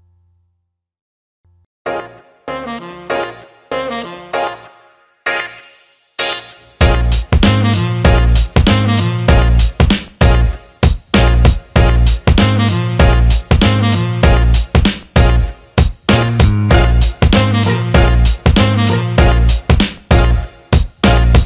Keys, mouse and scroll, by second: 1.9 click, 3.8 click, 6.0 ctrl+b, 9.2 alt+middle click, 10.5 click, 11.3 click, 12.4-13.4 drag, 13.6 alt+middle click, 14.9 click, 15.7 click, 16.4 alt+middle click, 17.4 click, 18.9 alt+middle click.